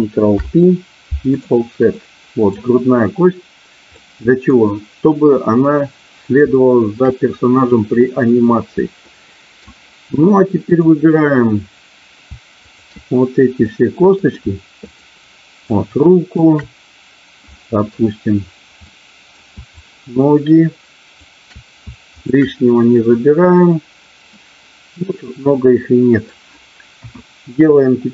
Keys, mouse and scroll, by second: 0.4 ctrl+p, 1.9 middle click, 4.0 middle click, 6.5 shift+middle click, 8.1 middle click, 8.6 middle click, 9.0 middle click, 10.6 click, 12.6 shift+click, 13.5 middle click, 14.9 shift+click, 15.6 shift+click, 17.5 middle click, 18.8 middle click, 19.8-21.3 shift+drag, 22.1 shift+click, 24.3-26.3 middle drag, 26.9 KP_1.